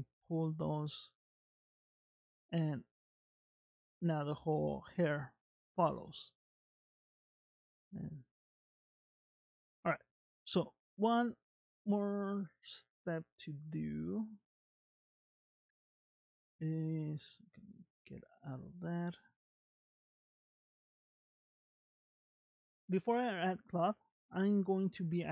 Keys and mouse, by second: 1.3 click, 2.0 g, 3.3 click, 3.9 g, 5.7 click, 6.9 g, 9.1-10.1 middle drag, 17.8 ctrl+Tab, 20.5 middle click, 24.2-25.3 drag.